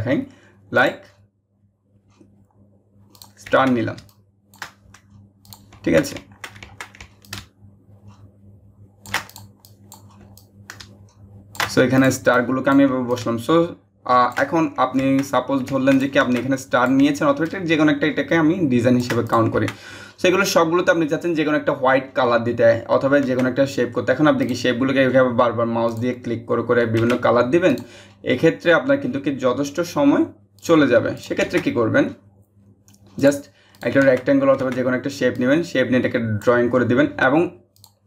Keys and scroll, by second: 26.7 ctrl+z.